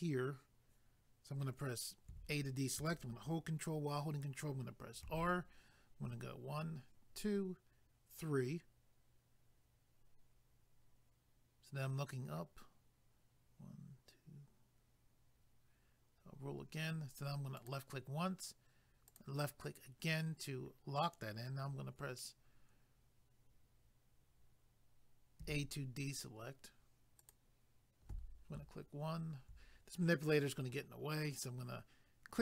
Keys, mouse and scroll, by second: 2.1 a, 5.0 ctrl+r, 6.9-7.7 scroll up 1, 7.7-8.2 scroll up 1, 16.1-16.6 scroll up 1, 19.1 click, 25.4 a, 27.2 click, 32.3 click.